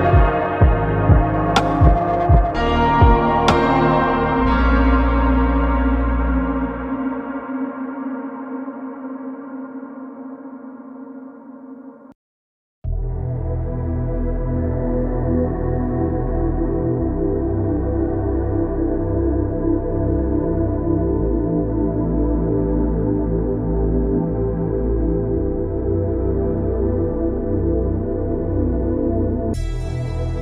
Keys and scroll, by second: 0.1 Escape, 8.2 4, 8.5 Return, 15.5 3, 16.2 Return, 19.7 Caps_Lock, 20.9 Tab, 21.1 Caps_Lock.